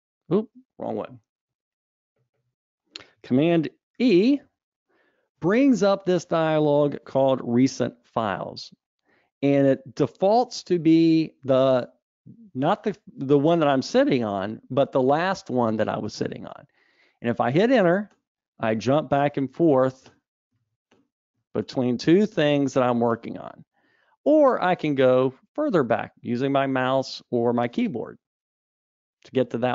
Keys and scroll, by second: 4.3 super+e, 20.6 super+e.